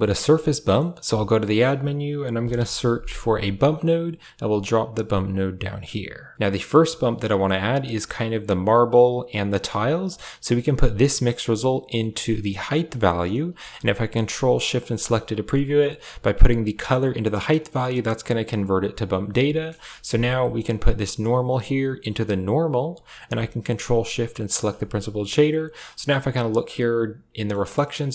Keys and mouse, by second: 0.2 middle click, 0.5 middle click, 1.0 shift+a, 6.4 click, 6.4 middle click, 10.0 click, 11.1-12.6 drag, 14.7 ctrl+shift+click, 15.0 click, 18.5-19.2 drag, 19.6 KP_0, 20.3 middle click, 20.7 click, 21.3-22.7 drag, 24.3 ctrl+shift+click, 25.3-25.7 middle drag, 26.0-27.4 middle drag, 27.8 middle click.